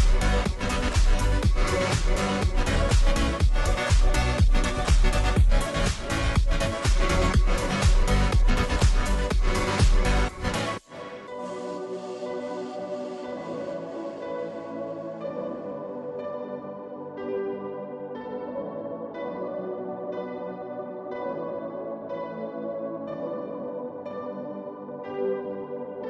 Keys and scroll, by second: 5.6 Return, 9.5 ctrl+g, 10.9-12.2 typing, 25.0 ctrl+d.